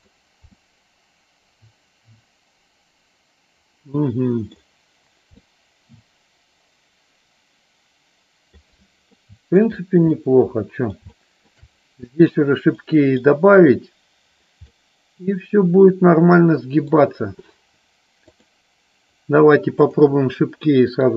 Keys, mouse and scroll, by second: 0.0 click, 0.7-4.5 middle drag, 4.5 scroll down 1, 5.4 scroll up 1, 5.5-8.6 middle drag, 9.1 scroll up 1, 9.3 middle click, 10.1 scroll up 1, 10.3 middle click, 11.1 shift+middle click, 12.2 scroll up 1, 12.3 scroll down 1, 12.8 middle click, 14.8-16.9 middle drag, 18.3 click, 19.9 click, 20.7 middle click.